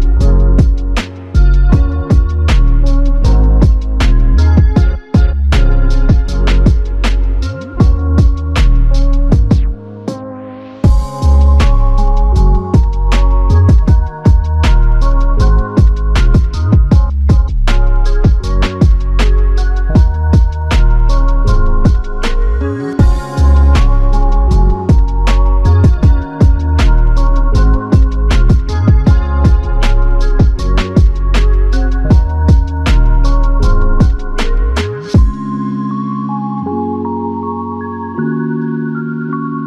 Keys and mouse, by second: 0.7 shift+click, 4.5 alt+click, 9.2 alt+click, 11.2 ctrl+click, 12.7 alt+click, 14.1 alt+click, 15.5 alt+l, 16.0 ctrl+click, 20.4 ctrl+click, 27.5 shift+click, 29.5 alt+click, 31.7 double click, 36.6 shift+click, 39.3 alt+shift+click.